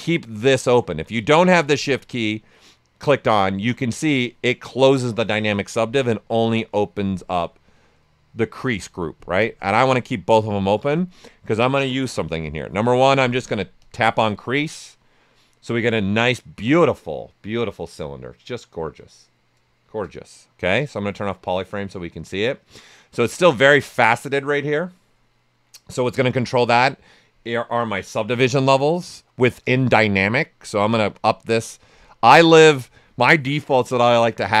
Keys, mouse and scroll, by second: 5.8-13.8 drag, 6.2 typing, 10.3 typing, 17.2-19.8 right drag, 17.2 typing, 19.8 shift+f, 20.9-28.3 right drag, 28.3 shift+m, 30.1 typing, 30.8-34.6 drag.